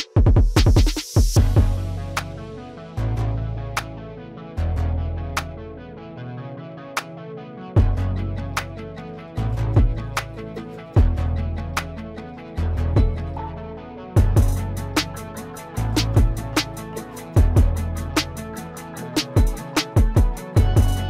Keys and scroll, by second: 15.9 F3.